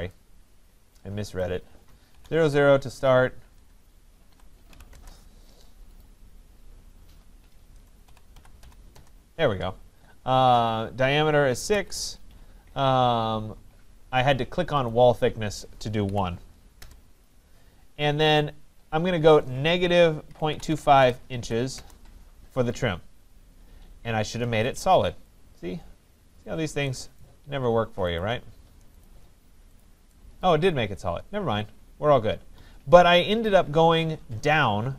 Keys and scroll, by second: 3.4 BackSpace, 4.9 Return, 16.8 Return.